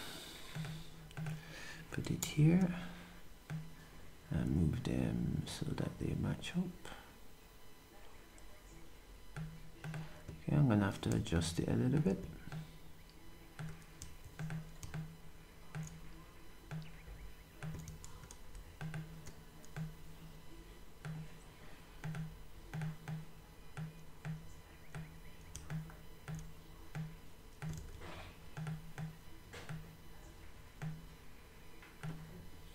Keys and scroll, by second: 2.2 v.